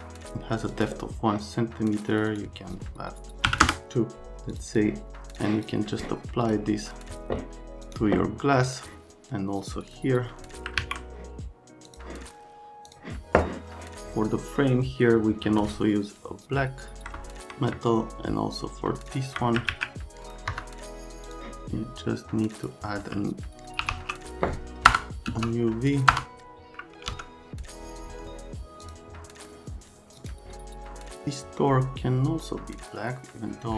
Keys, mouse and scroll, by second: 0.7 click, 2.1 click, 2.3 click, 3.5 KP_2, 3.6 KP_Enter, 4.5 click, 4.7 click, 5.4 click, 6.5 click, 6.9 click, 7.9 click, 8.7 click, 9.8 click, 10.8 alt+q, 11.9 click, 12.9 click, 19.0 click, 19.7 alt+q, 20.3 click, 20.5 F3, 21.3 click, 22.6 click, 23.6-27.1 typing, 28.9 click, 30.2 click.